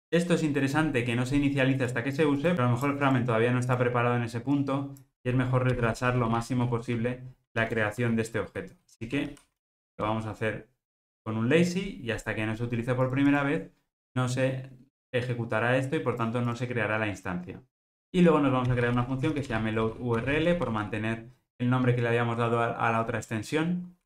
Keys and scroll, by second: 7.7 Return, 8.3 Return.